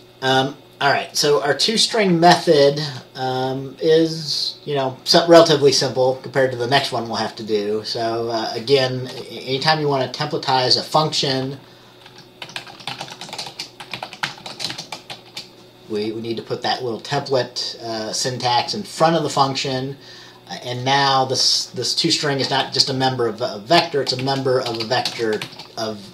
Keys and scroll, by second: 9.2 Return, 12.2-15.2 typing, 22.7 typing, 23.9-25.5 typing.